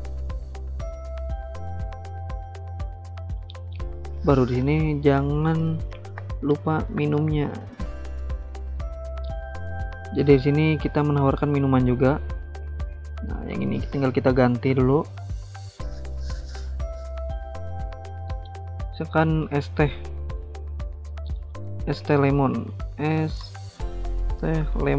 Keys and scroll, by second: 4.9-8.3 typing, 22.3 ctrl+a, 22.5-24.9 typing.